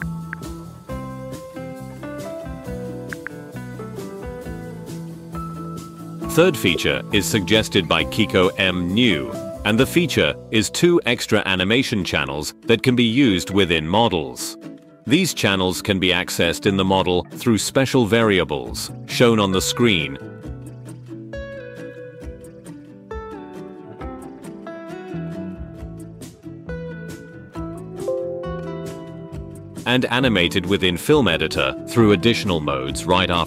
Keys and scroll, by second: 0.0 space, 3.2 space, 6.7 space, 8.7 g, 9.9 h, 12.3 4, 13.5 5, 18.7 h, 32.7 ctrl+r.